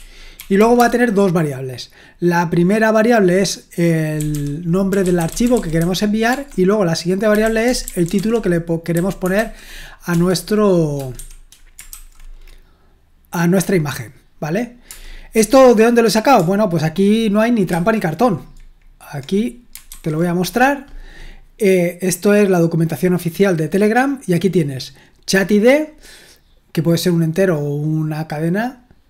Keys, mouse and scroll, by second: 0.0-1.2 typing, 3.9-10.1 typing, 11.1-11.9 typing, 14.8 Return, 17.7 super+2, 19.9 alt+1, 25.3 click, 25.6 click.